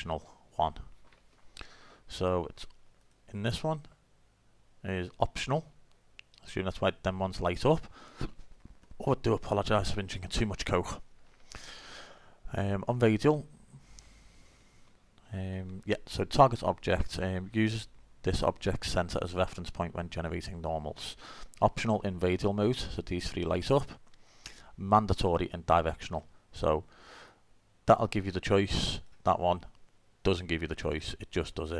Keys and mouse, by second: 3.0 click, 4.7 click, 4.9 middle click, 25.4-30.5 drag, 30.7 click.